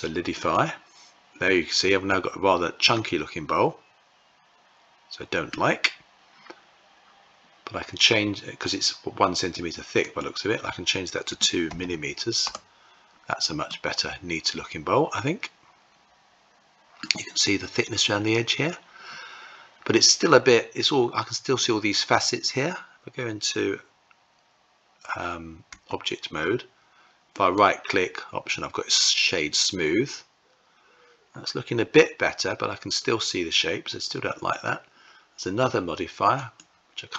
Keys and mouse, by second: 2.5-5.2 middle drag, 9.7-12.8 drag, 11.4 m, 13.4-16.7 middle drag, 25.4 Tab, 27.1-29.4 right drag, 36.0-37.1 drag.